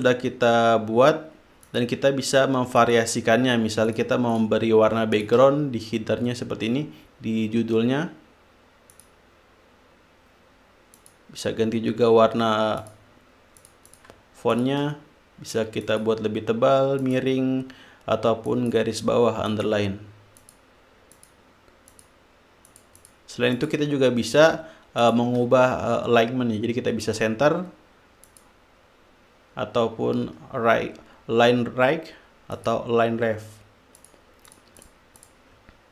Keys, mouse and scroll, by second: 0.1 click, 2.0 click, 3.2 click, 4.2 click, 4.7-5.2 drag, 5.5 shift+click, 9.3 click, 11.3 click, 13.2 click, 14.0-14.6 drag, 14.9 shift+click, 16.2 click, 17.4 click, 18.9 click, 19.9 click, 20.8 click, 21.5 click, 22.3 click, 23.0-23.6 drag, 23.9-24.8 drag, 25.4 shift+click, 27.4 click, 28.6 click, 33.0 click, 34.4 click, 34.8-35.4 drag, 35.6 click.